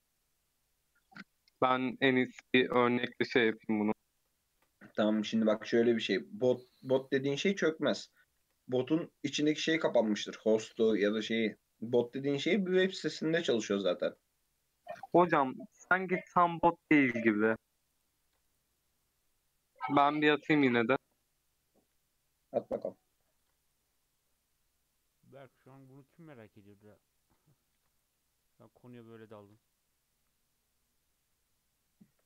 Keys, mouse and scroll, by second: 2.7-4.5 middle drag, 4.5 ctrl+r, 5.4 ctrl+b, 7.4 ctrl+r, 8.4 ctrl+b, 10.6 shift+middle click, 11.1-11.5 scroll down 1, 11.5 click, 12.8-14.0 scroll up 1, 14.0 ctrl+r, 16.1 ctrl+r, 18.2 ctrl+r, 22.4-23.4 middle drag, 23.4 ctrl+r, 25.5 ctrl+r, 27.7 ctrl+r, 29.4 ctrl+r.